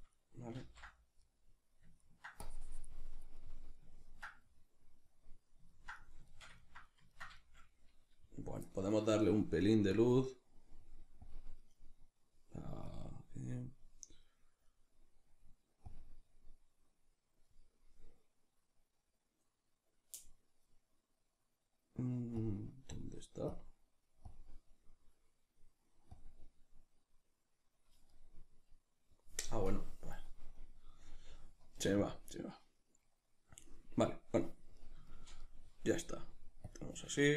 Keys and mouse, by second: 0.6 ctrl+z, 1.3-2.5 middle drag, 2.5-3.5 drag, 3.5-29.7 middle drag, 11.4 click, 29.7-34.8 drag, 34.8-37.3 middle drag.